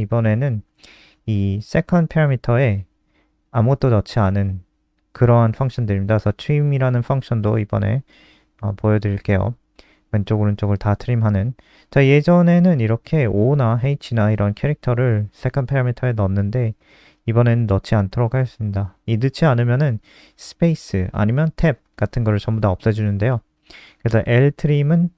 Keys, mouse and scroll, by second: 8.0 click, 13.2 ctrl+z, 15.0 click, 16.9 ctrl+y, 19.0 click.